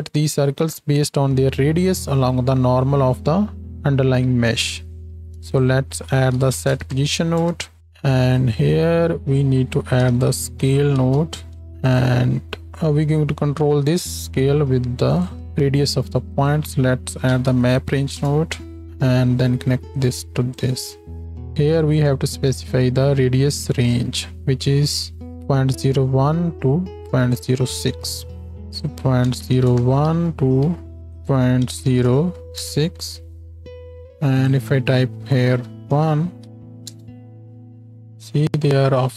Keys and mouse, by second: 5.1 shift+a, 7.8 click, 12.0-16.3 drag, 12.6 x, 15.4 shift+d, 18.8 click, 35.2 KP_1.